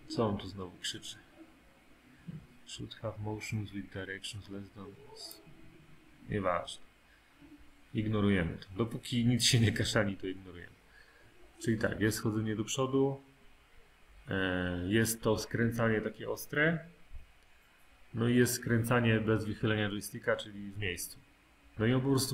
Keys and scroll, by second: 0.0 typing.